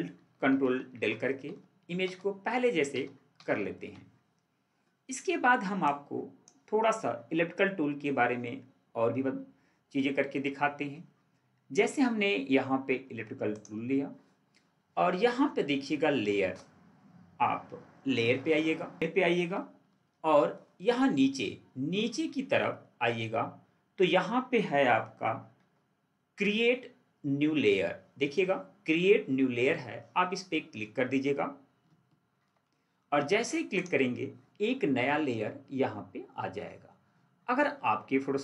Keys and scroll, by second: 0.7 ctrl+alt+z, 19.9 ctrl+4, 25.5 ctrl+4, 32.1 ctrl+4.